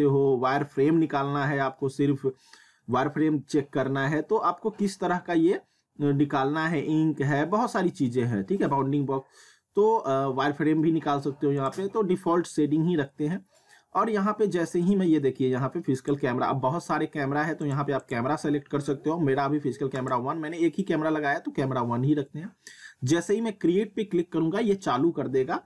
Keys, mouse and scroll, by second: 11.6 click, 16.0 click, 17.7 click.